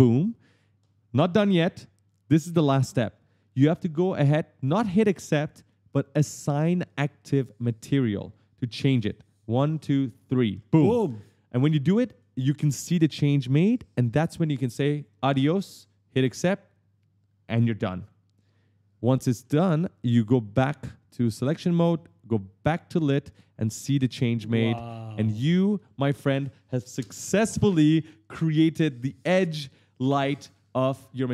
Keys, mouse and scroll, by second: 10.0 click, 11.7 right click, 13.6 right click, 16.0 click, 19.2 s, 19.5 right click, 20.9 click, 21.3 click, 22.5 click, 23.1 click, 23.8 right click, 23.8-25.6 typing, 24.6 click, 29.1 click, 29.3-30.8 typing, 29.5 right click, 30.4 right click.